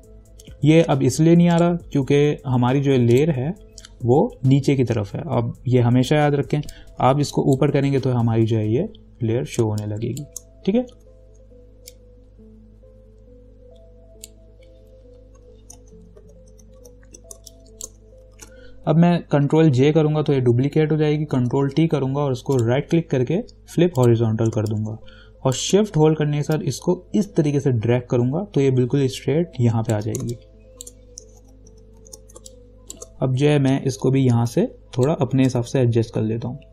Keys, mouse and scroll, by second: 1.7 right click, 3.3 click, 6.9-9.8 drag, 9.8 space, 10.0 click, 10.4 space, 11.2 v, 12.1-16.4 drag, 16.4 ctrl+-, 17.6 space, 17.7 click, 18.5 ctrl+-, 19.9 ctrl+j, 21.6 ctrl+t, 22.8 right click, 24.2 click, 24.8 space, 24.9 click, 25.3 space, 26.8-30.4 shift+drag, 30.4 space, 30.5 click, 31.0 space, 31.6 ctrl+=, 32.6 space, 32.7 click, 32.7 click, 33.1 space, 33.9-36.7 drag.